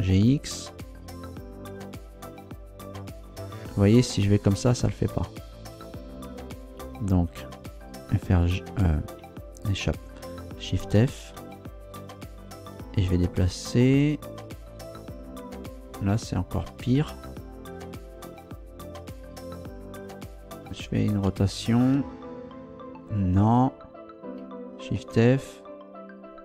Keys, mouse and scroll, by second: 0.1 x, 6.8 Escape, 8.4 g, 9.8 Escape, 11.3 shift+f, 12.1 Right, 12.8 Left, 15.1 Right, 15.8 Left, 17.0 Return, 20.6 r, 23.4 Escape, 24.9 shift+f.